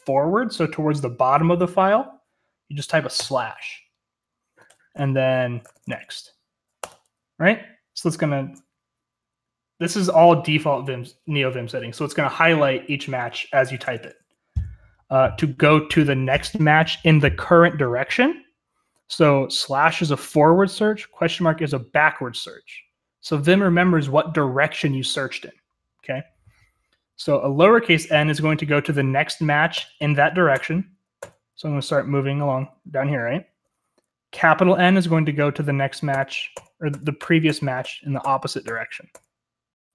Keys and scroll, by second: 5.3-6.8 typing, 29.7-33.2 typing, 36.1-38.6 typing.